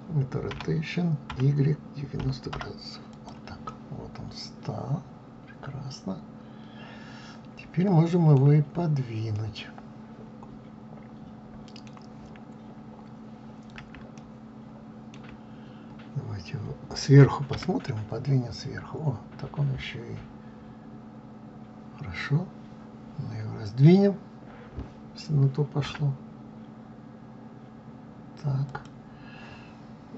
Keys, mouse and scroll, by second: 0.3 r, 3.4-6.4 middle drag, 9.0-12.1 middle drag, 12.8-13.1 scroll up 1, 13.9-16.9 shift+middle drag, 17.2 KP_7, 19.2 scroll down 2, 25.6 s.